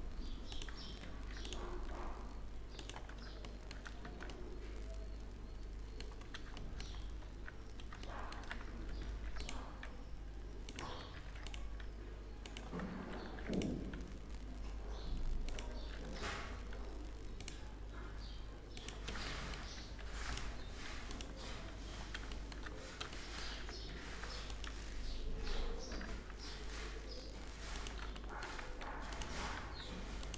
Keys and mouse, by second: 0.7 ctrl+r, 3.1 click, 3.6 click, 3.7 Tab, 8.5 Tab, 8.7 ctrl+r, 10.7 ctrl+r, 12.8 ctrl+r, 15.5 ctrl+r, 19.7 ctrl+r, 21.1 Tab, 24.2 Tab, 24.2 ctrl+r, 25.5 g, 28.5 ctrl+r.